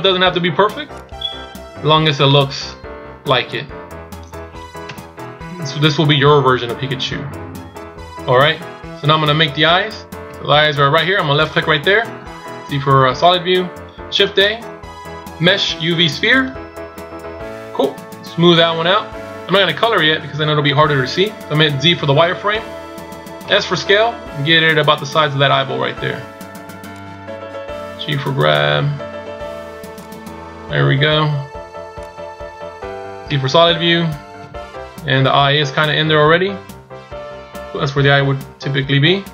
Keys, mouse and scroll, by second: 0.8 right click, 3.4 click, 4.7 KP_1, 5.1 z, 6.8 z, 11.2 click, 12.1 z, 14.0 shift+a, 18.5 click, 21.9 z, 23.5 s, 32.0 click, 33.2 z, 34.3 KP_7, 36.1 KP_1, 36.5 KP_3, 37.8 KP_1, 38.2 KP_7.